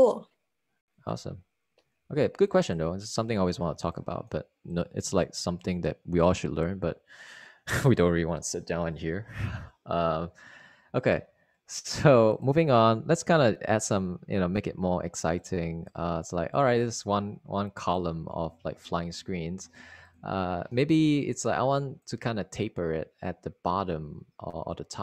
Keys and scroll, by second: 2.9 super+w, 19.5 super+Right.